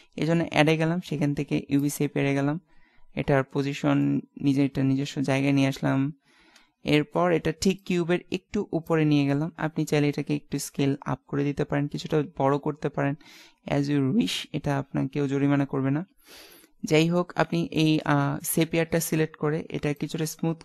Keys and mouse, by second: 3.4 alt+g, 5.1 KP_Decimal, 5.4 KP_5, 5.6 KP_3, 5.8 KP_5, 8.0 click, 10.8-12.7 middle drag, 13.4-15.0 middle drag, 17.2-19.0 drag, 19.8-20.6 drag.